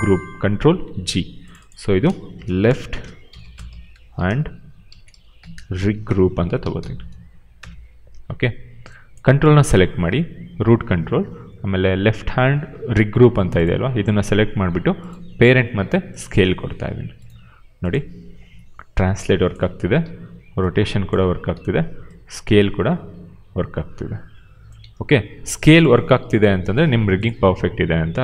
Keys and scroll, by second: 0.7 ctrl+g, 2.2-7.2 typing, 7.5 Return, 18.4 w, 19.7 ctrl+z, 19.9 e, 21.1 ctrl+z, 21.4 r, 24.8 ctrl+z.